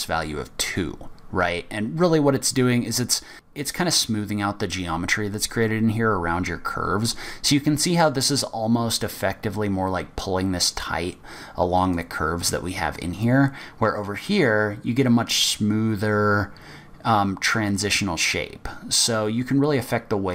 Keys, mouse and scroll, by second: 3.3 middle click, 3.3-5.1 scroll up 3, 12.1 click.